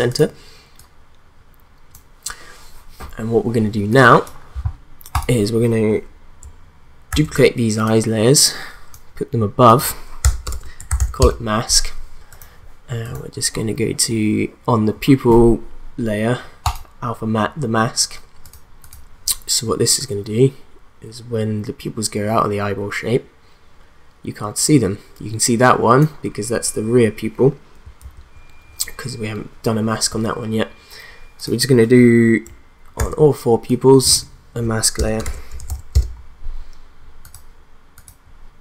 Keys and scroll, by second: 7.1 ctrl+d, 10.2 Return, 10.3-11.5 typing, 28.0 ctrl+z, 33.0 ctrl+d, 34.9 Return, 35.0-36.5 typing.